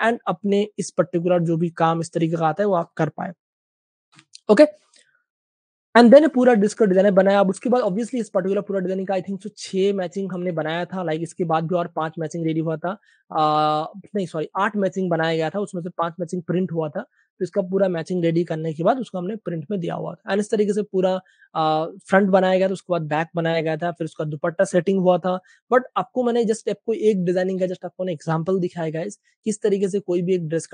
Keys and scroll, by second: 4.2-5.0 typing, 6.6 typing, 13.4 space, 27.6 space.